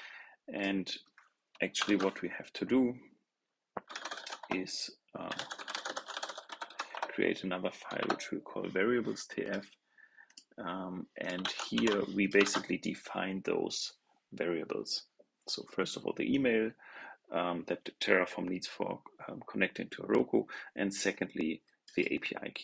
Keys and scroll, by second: 1.7 super+n, 11.3 super+a, 11.6 super+c, 12.3 super+v.